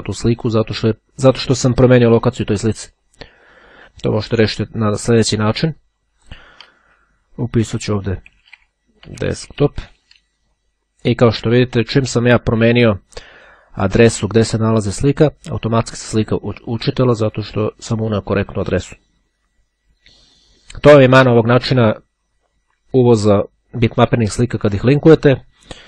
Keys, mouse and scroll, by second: 6.3 shift+d, 8.5-10.4 typing, 13.7-14.7 drag, 17.7 click.